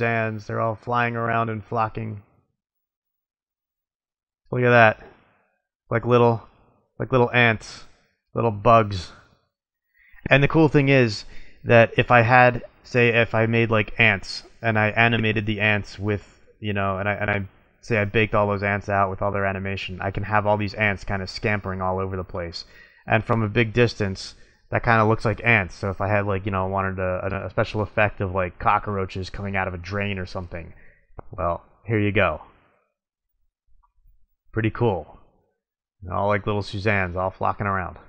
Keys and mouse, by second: 0.1 middle click, 0.3 middle click, 0.8 middle click, 3.2-4.8 middle drag, 9.1 middle click, 9.6-11.6 middle drag, 14.8 middle drag, 15.1 middle drag, 16.2-16.6 middle drag, 22.8-23.5 middle drag, 23.6 middle click, 23.8 middle click, 25.6 middle click, 27.3-28.4 middle drag, 35.1 middle click, 35.3 middle click, 35.6 middle click, 36.5 middle click.